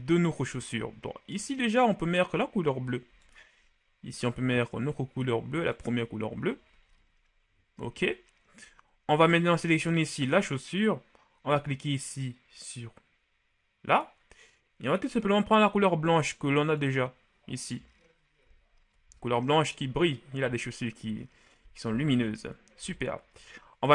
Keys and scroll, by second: 7.1 a, 18.8 a.